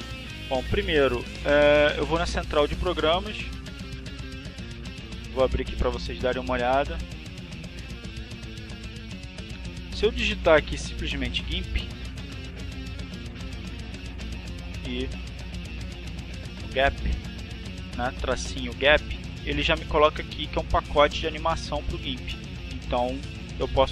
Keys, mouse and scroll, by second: 1.1 click, 2.8 click, 8.8 click, 9.5-10.8 typing, 13.8 -, 14.1 a, 15.1 p, 18.9 click.